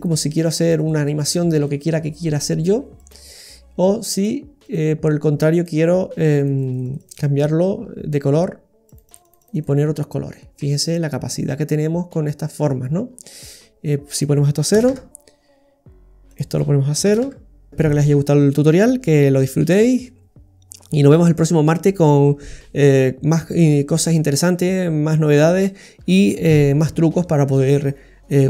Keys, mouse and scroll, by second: 2.9 click, 4.8 click, 6.1-6.8 click, 6.7 click, 7.8 click, 7.8-8.2 scroll down 1, 8.3-8.8 scroll down 1, 8.8 click, 9.1 click, 9.2 click, 9.4 click, 10.1 click, 10.4 scroll up 1, 10.6 middle click, 12.8-13.4 scroll down 4, 14.1 click, 14.1 scroll down 1, 16.3 click.